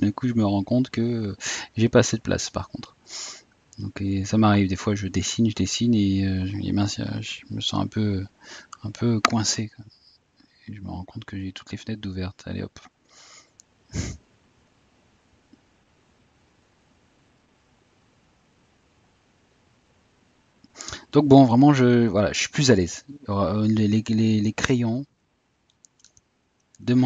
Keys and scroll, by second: 10.3 typing.